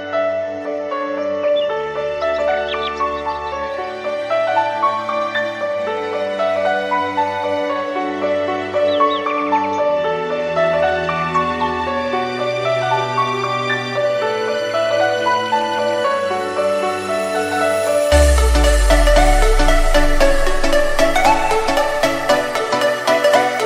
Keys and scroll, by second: 6.3 2, 7.3 Return, 9.0 m, 11.9 Escape, 16.5 Left, 20.2 2, 21.5 Return.